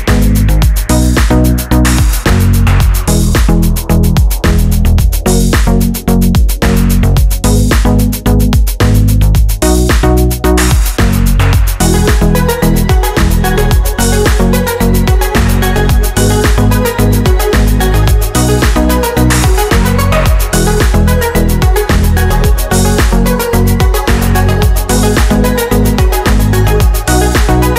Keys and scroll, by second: 4.3 d, 16.9 Down, 17.1 Down, 17.2-17.8 typing, 18.1 Left, 18.9-20.9 typing, 23.8 ctrl+d.